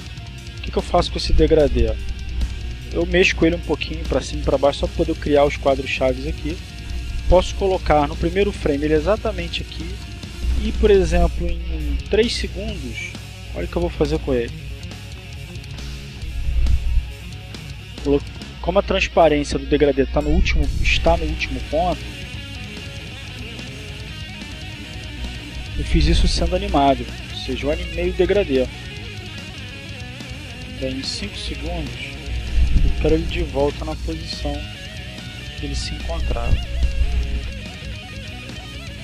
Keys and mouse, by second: 1.2 Down, 1.7 Up, 4.1 Down, 4.6 Up, 8.7-12.7 drag, 12.8 click, 14.0 Up, 21.7-29.5 drag, 30.2 click, 31.0 click, 32.2 Down, 33.7 Down.